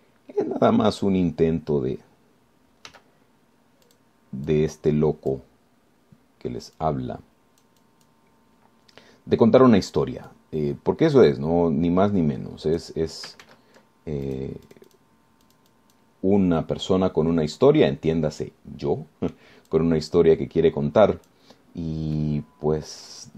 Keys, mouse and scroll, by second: 0.5 shift+middle click, 4.1 f, 5.1 click, 5.7-6.7 drag, 8.0-9.5 drag, 11.5-14.2 drag, 14.7 ctrl+z, 15.5 ctrl+click, 15.9 click, 16.7 click, 18.1 scroll down 2, 18.9-20.7 drag, 20.9-22.7 drag, 22.9-23.3 scroll down 2.